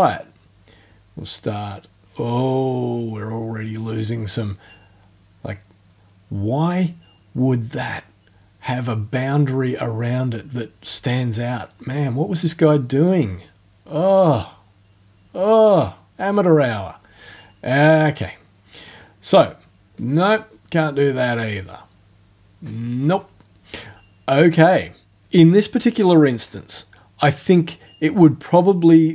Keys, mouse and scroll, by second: 12.8-16.9 drag, 18.3-20.1 drag, 20.5-23.3 drag.